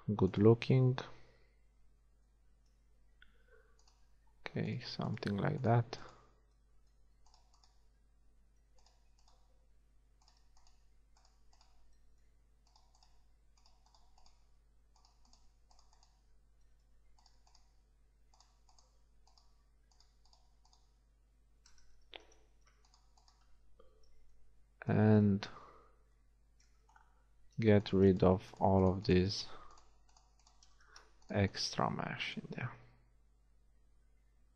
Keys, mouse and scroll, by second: 1.9 shift+f, 6.5 shift+f, 9.8 f, 12.0 f, 14.7 f, 16.5 f, 21.2 f, 22.1 ctrl+z, 24.3 f, 24.9 middle click, 25.1 a, 32.0 x.